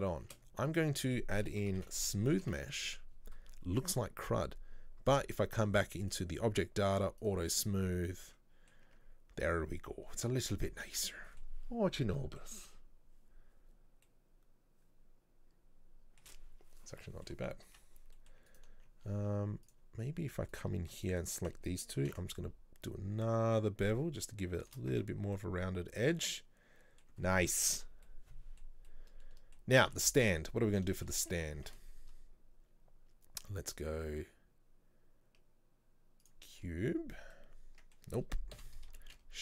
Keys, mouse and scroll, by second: 2.5 o, 7.3 click, 8.0-8.9 middle drag, 8.9 Tab, 11.0 Tab, 11.2-17.8 middle drag, 17.8 Tab, 18.2 middle click, 18.6 alt+right click, 19.7 click, 20.6 alt+right click, 21.1 alt+shift+right click, 22.1 ctrl+b, 25.0 Tab, 25.4-28.7 middle drag, 28.7 scroll down 1, 28.9-30.7 middle drag, 30.7-31.0 scroll up 1, 31.0-36.4 shift+middle drag, 36.6-37.4 scroll down 3, 37.4 scroll down 5, 37.4-38.6 middle drag, 38.6 Delete.